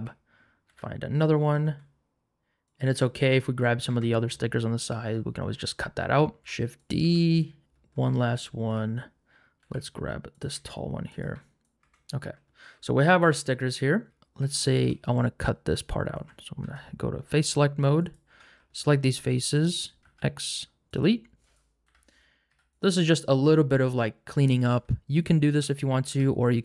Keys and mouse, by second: 0.7 g, 1.6 s, 2.8 g, 3.9 Tab, 6.4 shift+d, 6.8 click, 7.0 Tab, 9.6 g, 10.5 s, 11.1 click, 11.2 g, 11.7 s, 11.8 Tab, 16.2 3, 16.6 3, 18.0 alt+click, 20.0 x, 21.8 l, 22.5 x, 26.1 x.